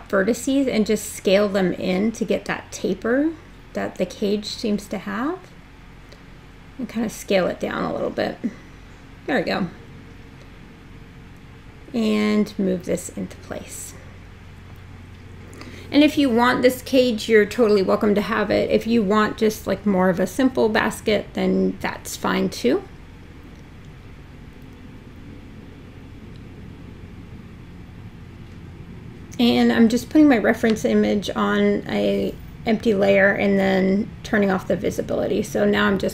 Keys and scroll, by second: 0.8 r, 4.8 w, 9.7 w.